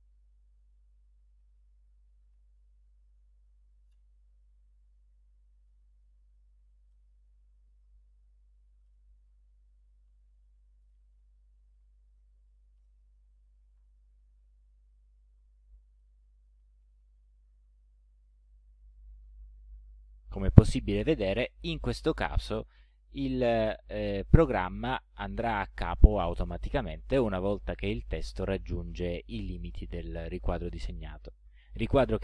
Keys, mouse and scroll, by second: 0.0-2.4 typing, 3.9 Return, 5.5-17.5 typing.